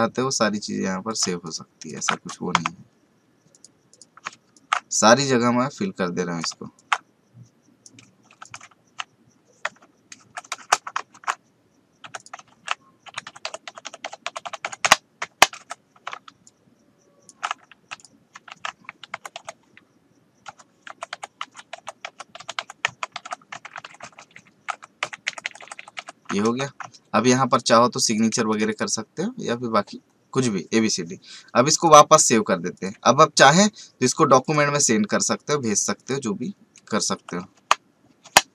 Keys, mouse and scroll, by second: 4.5-6.7 ctrl+alt+shift+drag, 8.3 t, 8.4 click, 10.2 v, 11.1 ctrl+alt+z, 12.0 t, 12.1 click, 12.5 ctrl+a, 15.6 v, 16.4 ctrl+alt+shift+click, 17.9 t, 18.5 ctrl+a, 23.2 v, 24.0 ctrl+shift+Left, 24.7 ctrl+shift+Down, 25.0 ctrl+Left, 25.9 ctrl+Down, 26.4 v, 26.9 alt+scroll down 1, 27.5 click, 28.3 space, 28.5 right click, 28.7 click, 31.7 click.